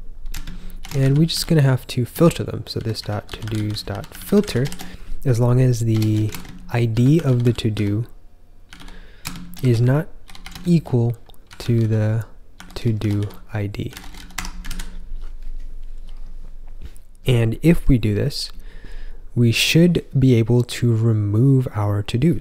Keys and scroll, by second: 0.5-14.8 typing.